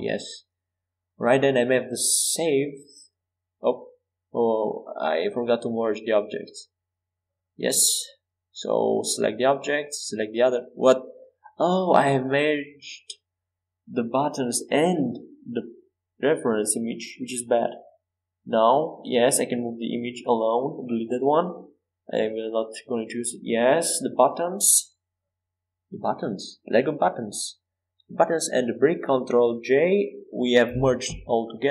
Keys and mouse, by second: 0.0 KP_Enter, 3.2-4.7 drag, 4.7 ctrl+z, 5.6 middle click, 5.8 middle click, 6.2-7.9 drag, 7.3 g, 9.3-12.3 drag, 10.0 g, 14.2 ctrl+z, 14.5 ctrl+z, 14.8 ctrl+z, 15.1 ctrl+z, 15.4 ctrl+z, 15.5 ctrl+z, 16.1 ctrl+z, 16.3 ctrl+z, 16.5 ctrl+z, 16.8 ctrl+z, 17.0 ctrl+z, 17.3 ctrl+z, 19.2 g, 20.8 x, 23.2 g, 27.8-29.8 right drag, 29.8 ctrl+j.